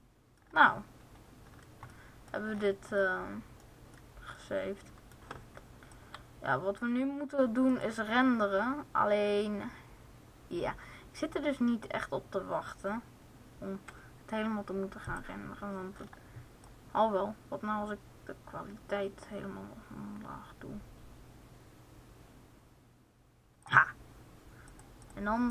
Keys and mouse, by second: 6.2-9.5 drag, 14.7-18.1 drag, 24.4-25.5 drag.